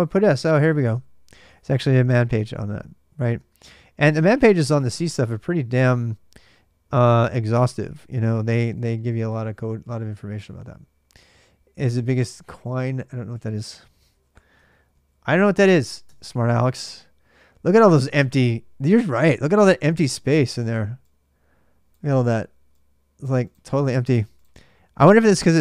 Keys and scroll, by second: 2.2 typing, 3.2 space, 7.1-10.7 typing, 11.7 Return, 12.5 ctrl+[, 12.7-14.7 typing, 14.4 ctrl+[, 15.9 Return.